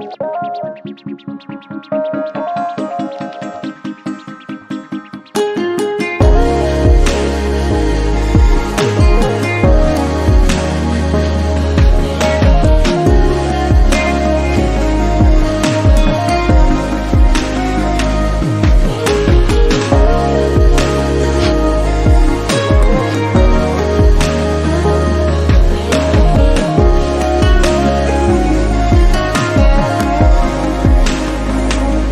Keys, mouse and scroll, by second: 1.5 click, 2.4 shift+middle click, 2.7 click, 3.2 click, 4.0 click, 4.2-4.5 scroll down 8, 4.5 Tab, 4.9 shift+middle drag, 5.1-5.9 scroll up 12, 5.4 shift+middle click, 5.9 click, 6.1 Tab, 6.4 Tab, 6.8 click, 7.0 Tab, 7.1 scroll up 2, 7.5 click, 8.4 click, 9.5 click, 10.1 click, 11.2 Tab, 11.5 click, 11.7-12.3 scroll down 10, 12.3 alt+z, 12.8 shift+middle drag, 13.0-13.3 scroll up 10, 13.4-13.7 shift+middle drag, 13.7 click, 14.5 alt+z, 14.8 click, 15.5 x, 15.9-16.2 scroll up 1, 16.6 click, 17.3 click, 18.5 click, 19.3 click, 19.6 click, 20.3 x, 20.8 click, 21.3 click, 22.5 Tab, 22.6-23.0 scroll down 6, 23.0 alt+z, 23.2 click, 23.4 scroll down 4, 23.7 shift+middle click, 24.1-24.5 scroll up 2, 24.5 scroll down 1, 24.5-25.1 middle drag, 25.1 click, 26.2-26.9 drag, 27.3-27.7 middle drag, 27.7-28.1 scroll up 1, 28.1-29.2 middle drag, 29.2 scroll down 1, 29.4 scroll up 2, 29.6-30.7 middle drag, 30.7 click.